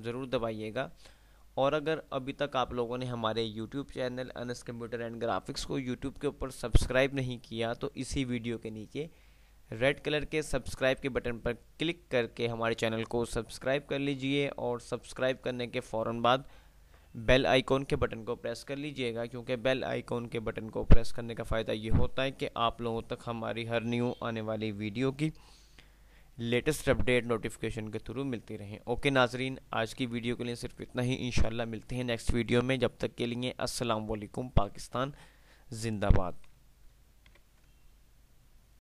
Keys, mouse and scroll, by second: 37.5 ctrl+F10.